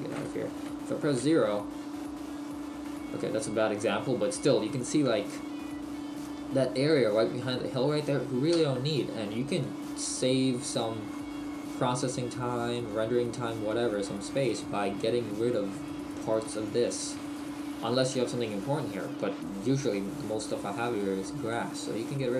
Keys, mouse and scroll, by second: 1.1 KP_0, 5.0 Tab, 8.6 Tab, 9.6 middle click, 11.1 middle click, 11.1 scroll down 1, 12.2 middle click, 12.5 middle click, 12.8 middle click, 13.7 Tab, 14.4 right click, 17.4 shift+middle click, 21.5 shift+middle click, 22.2 right click.